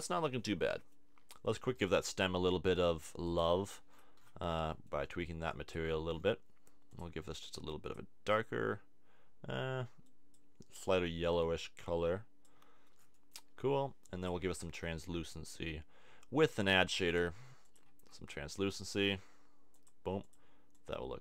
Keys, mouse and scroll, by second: 1.7-3.3 drag, 3.9 click, 5.1 click, 12.9-14.6 middle drag, 14.6 shift+a, 17.9 shift+a, 20.3 click.